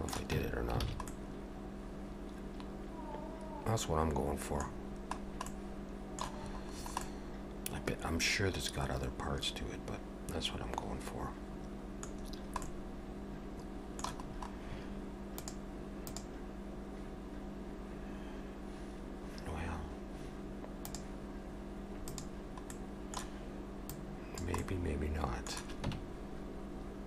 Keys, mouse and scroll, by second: 0.4 Tab, 0.9 alt+a, 1.1 middle click, 4.7-5.4 scroll down 5, 5.5 middle click, 6.4-7.0 scroll up 5, 7.0 middle click, 12.2-13.7 scroll down 4, 12.6 middle click, 14.3-15.3 scroll up 2, 15.3 scroll up 1, 22.0 click, 22.7 middle click, 23.9 click, 24.6 middle click, 25.9 Tab.